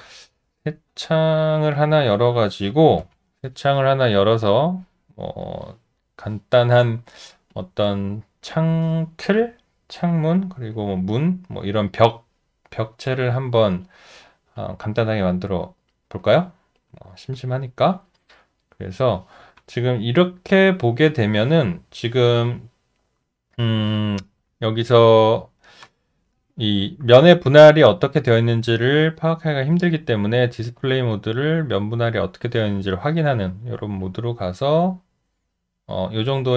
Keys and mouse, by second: 0.5 alt+middle click, 3.0 ctrl+n, 16.7 alt+middle click, 16.9 alt+click, 17.1 alt+double click, 17.3 alt+click, 18.4 alt+right click, 18.7 alt+middle click, 21.8 `, 22.6 alt+middle click, 29.0 alt+click, 34.0 alt+click.